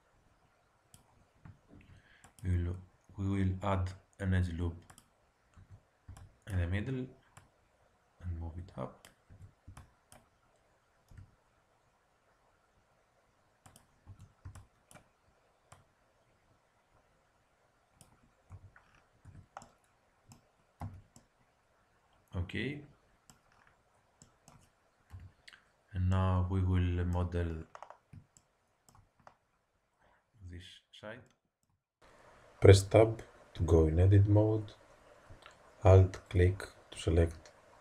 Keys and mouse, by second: 1.6 ctrl+r, 5.5 a, 6.0 b, 7.3-9.2 drag, 9.3 a, 9.6 b, 11.1 g, 14.0 a, 14.4 b, 15.6-17.3 drag, 18.5 a, 19.2 Tab, 20.8 z, 23.0 middle click, 25.0 KP_1, 30.1-31.2 middle drag, 32.1 KP_1, 33.5 Tab, 36.2 click, 36.9 click.